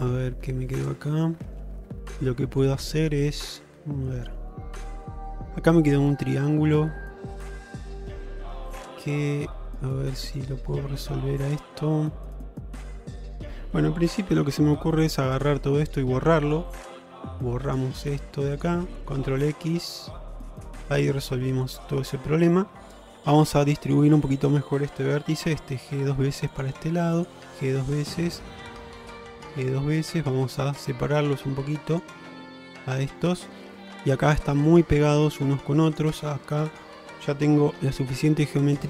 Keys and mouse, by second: 4.9 middle click, 6.5-13.6 middle drag, 14.4 2, 15.9 shift+click, 16.9 middle click, 17.7 shift+click, 19.3 ctrl+x, 19.7 middle click, 21.3 middle click, 23.2 1, 23.6 middle click, 25.3 g, 27.2 click, 27.4 g, 28.4 middle click, 29.1 click, 29.4 g, 30.5 middle click, 31.5 g, 32.6 middle click, 32.9 middle click, 33.8 middle click, 34.4 middle click, 35.3 shift+middle click, 35.9 click, 36.7 shift+click, 37.8 g.